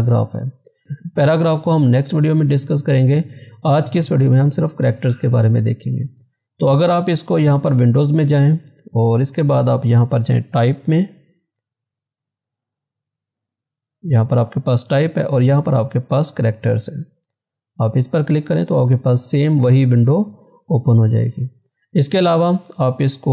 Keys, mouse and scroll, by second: 4.1 click, 4.2 click, 6.6 click, 17.3 click, 22.9 click.